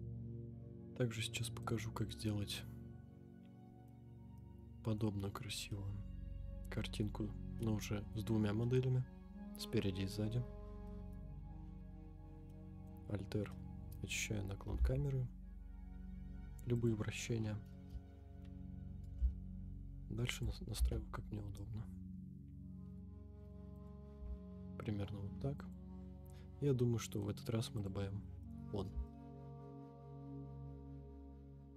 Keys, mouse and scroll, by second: 0.1-0.5 scroll up 2, 0.5-1.6 middle drag, 1.7 scroll up 3, 2.2-3.9 middle drag, 4.0 scroll up 2, 4.3-5.0 middle drag, 5.1 scroll down 2, 5.7-7.0 middle drag, 5.7-6.9 scroll down 1, 7.5 scroll up 1, 7.6-8.1 middle drag, 8.6-10.3 middle drag, 10.4 scroll down 2, 10.9 middle drag, 11.8 alt+r, 12.5-12.8 middle drag, 13.1-13.4 scroll down 1, 13.5-13.9 middle drag, 14.7 r, 14.7 x, 16.9 click, 17.7 KP_0, 19.1 g, 19.2 x, 20.4 click, 20.7 g, 23.9 click, 24.2 g, 24.2 z, 25.7 click, 26.8-27.2 middle drag, 27.3 scroll down 2, 27.8 click, 28.1-28.4 scroll down 2, 28.4 middle drag, 29.0 shift+middle drag, 29.3 Tab, 29.5 right click, 29.7 right click, 29.9 scroll down 1, 29.9 middle click, 30.2 click, 30.3 click, 30.5 middle click, 30.8 KP_1, 30.9 KP_3, 31.1 g, 31.2 z, 31.7 right click.